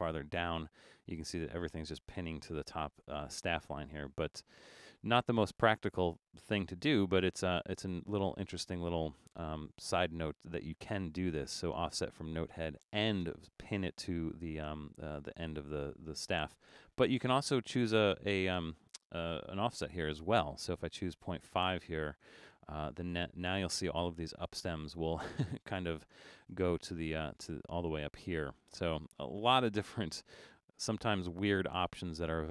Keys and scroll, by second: 19.1-20.3 typing.